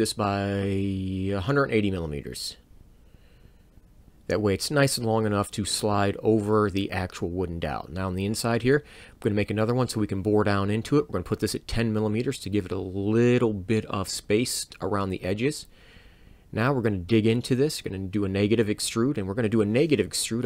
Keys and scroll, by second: 2.6 1, 2.9 8, 3.2 0, 3.6 m, 4.7 Return, 7.9 c, 11.7 1, 12.0 o, 14.7 m, 15.7 Return, 18.6 e, 18.6 e.